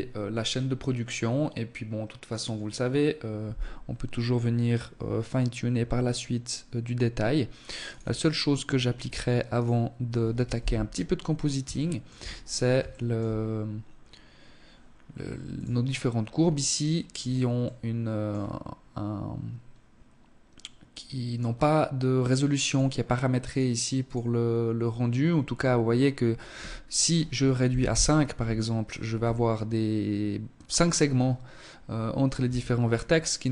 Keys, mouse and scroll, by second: 7.2 click, 7.9-8.5 scroll up 2, 8.5 right click, 9.5 KP_1, 10.2 scroll up 2, 10.7 shift+middle click, 11.2-11.6 scroll up 2, 11.8 shift+middle click, 12.3-12.7 scroll up 2, 14.4 click, 15.3 scroll up 2, 16.1 scroll up 3, 16.5 middle click, 21.5 click, 22.9 click, 27.7 scroll down 1, 28.1 Tab, 31.4 Tab, 31.9-33.1 scroll up 3, 33.1 click.